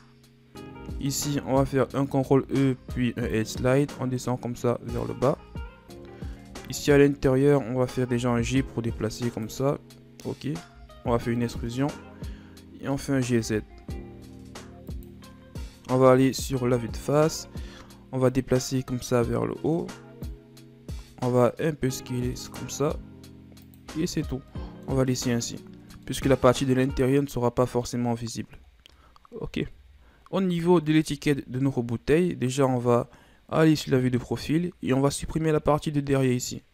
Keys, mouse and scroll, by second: 1.1 alt+right click, 2.3 ctrl+e, 5.3 Tab, 5.9 Tab, 6.7 alt+right click, 8.1 g, 10.8 e, 12.9 g, 16.0 KP_1, 16.6 z, 17.4 scroll down 1, 18.3-20.9 drag, 20.9 s, 23.9 z, 24.3 scroll down 1, 24.5 middle click, 25.2 Tab, 25.3-25.9 scroll up 4, 25.9 scroll down 1, 26.1-28.2 middle drag, 28.2-28.8 scroll down 5, 29.8 KP_1, 30.9-31.5 scroll down 5, 31.5-32.5 scroll up 2, 32.5 right click, 34.1 KP_3.